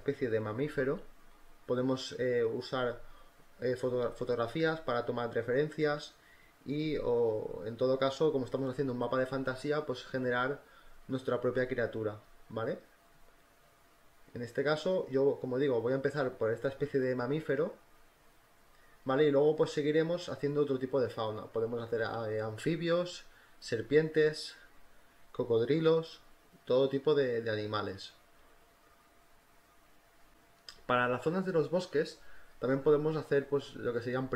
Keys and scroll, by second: 5.0-7.4 typing, 9.6-12.0 typing, 12.7 ctrl+z, 13.0 ctrl+z, 13.3 ctrl+z, 14.1 ctrl+z, 15.2 ], 16.2 ctrl+t, 17.6 ctrl+t, 17.9 Return, 18.1 ctrl+t, 18.3 Return, 18.4-19.5 typing, 20.7 ctrl+z, 22.5 e, 24.8 ctrl+z, 27.1 space, 29.3 ctrl+t, 29.5-30.7 typing, 31.7 ctrl+z, 32.0 ctrl+z, 33.1 ], 33.4 [, 33.6 ], 33.9 ctrl+t, 34.2 Return.